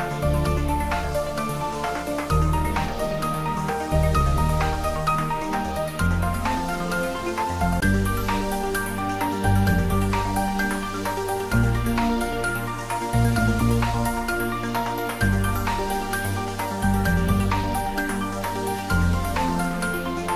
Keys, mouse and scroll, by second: 6.4 click, 8.2 g, 8.8 y, 9.5 Up, 12.5 click, 13.8-14.9 typing, 15.9 click, 18.4-19.3 typing.